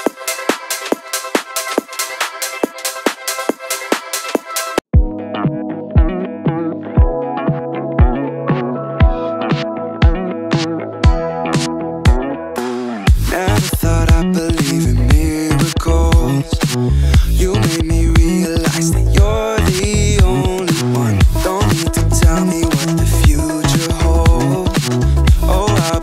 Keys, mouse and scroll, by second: 0.3 right click, 2.1 s, 2.5 shift+z, 10.2 KP_Decimal, 10.4 KP_0, 10.8 KP_8, 11.3 click, 11.8 scroll up 1, 12.2-12.5 shift+middle drag, 12.6-12.9 scroll up 1, 13.7 g, 14.1 z, 15.5 click, 16.1 shift+middle drag, 16.4-16.9 scroll up 3, 17.1 shift+middle drag, 17.5 right click, 19.9-22.9 drag, 24.2 click.